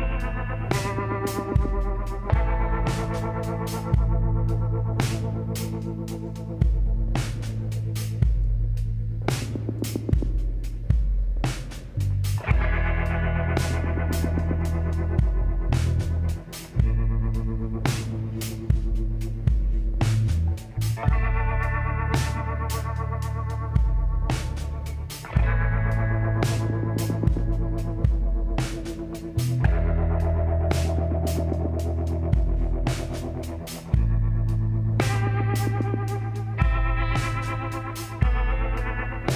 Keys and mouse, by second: 1.2-3.9 drag, 3.9-5.2 middle drag, 5.3 middle click, 5.5-9.1 drag, 10.5 e, 13.0 s, 16.8-18.5 middle drag, 18.7 middle click, 19.0-22.6 drag, 21.4-23.2 middle drag, 22.9-25.4 drag, 23.4 middle click, 24.4 w, 34.9-36.8 drag, 35.7 x, 37.6-39.3 drag.